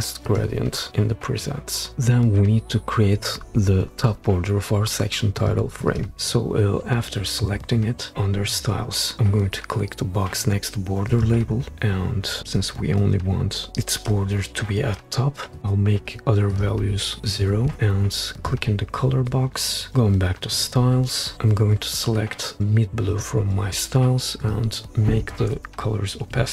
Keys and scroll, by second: 16.0 0, 16.8 0, 17.6 0, 26.3 5.